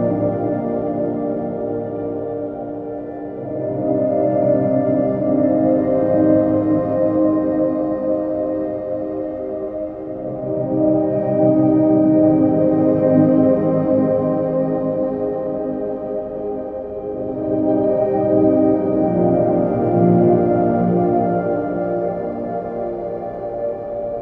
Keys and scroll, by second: 2.2 ctrl+t, 6.2 ctrl+z.